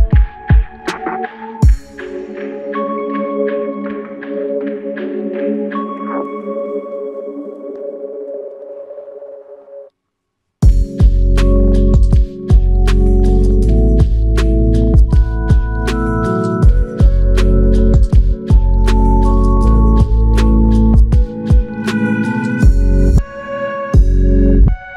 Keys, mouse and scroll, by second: 5.1 alt+click, 13.1 alt+click, 13.1 alt+click, 19.6 alt+click, 21.1 ctrl+alt+click.